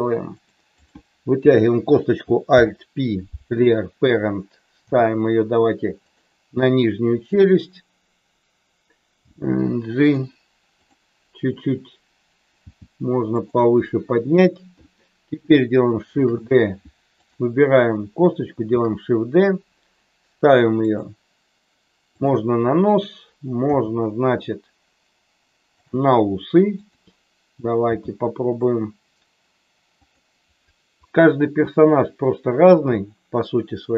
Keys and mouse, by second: 0.3 click, 0.7 click, 2.6 alt+p, 4.8 g, 9.2 g, 9.9 click, 10.8 click, 12.5 g, 13.3 click, 15.9 shift+d, 17.2 click, 18.7 shift+d, 23.7 g, 25.8 click, 26.7 click, 27.8 g, 29.9 click, 33.0-33.9 middle drag.